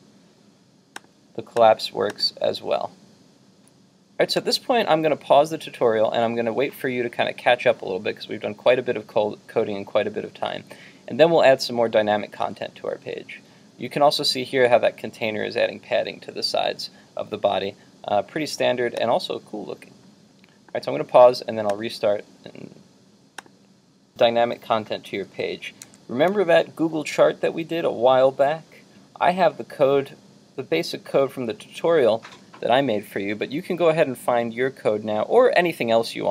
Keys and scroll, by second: 25.9 super+Tab.